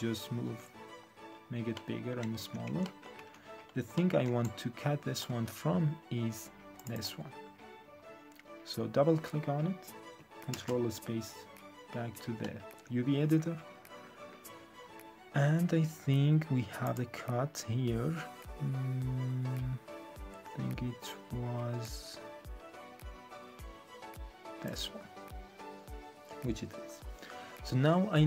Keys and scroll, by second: 2.3 1, 3.1 3, 10.5 ctrl+space.